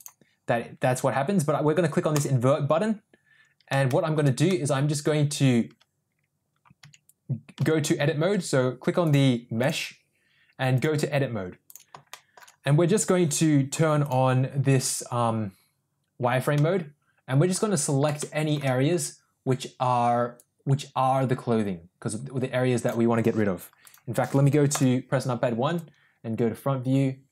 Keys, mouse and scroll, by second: 0.0 click, 2.2 click, 3.9 shift+middle click, 4.5 middle click, 7.1 Tab, 7.9 Tab, 10.9-12.0 drag, 12.2 shift+middle click, 14.1 click, 16.6 middle click, 18.2 shift+middle click, 20.4-23.0 drag, 23.9 click, 24.7 KP_1, 25.8-27.3 drag.